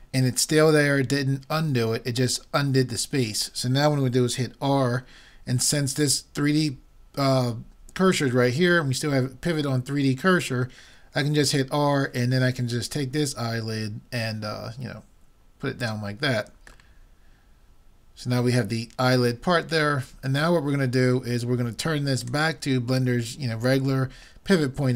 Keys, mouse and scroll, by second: 11.4 r, 17.0-18.8 middle drag, 22.2-24.1 drag.